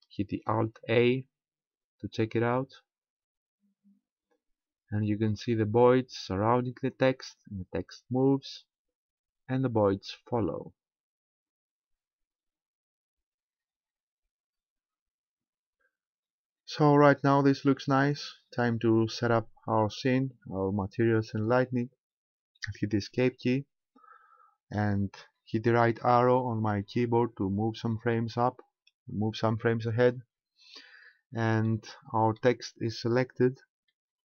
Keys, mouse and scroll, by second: 0.1 alt+a, 23.4 Escape, 26.3-28.8 Right, 31.7 middle click, 33.9 shift+middle click.